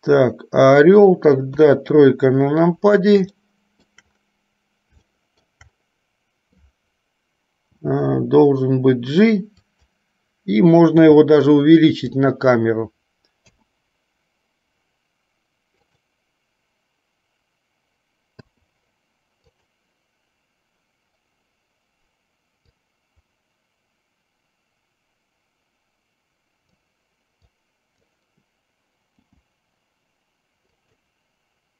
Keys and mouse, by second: 1.7 KP_3, 3.6 middle click, 5.3 shift+middle click, 7.8 g, 11.2 s, 13.7 i, 16.1 click, 18.6 i, 19.7 click, 22.9-27.1 drag, 27.7 click, 29.4 g.